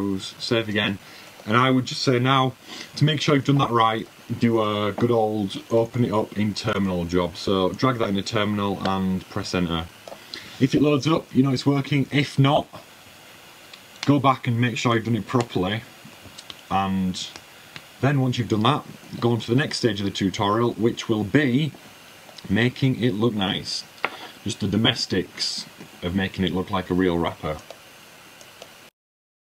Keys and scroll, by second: 0.0-0.2 typing, 1.2 super+w, 6.1 super+Tab.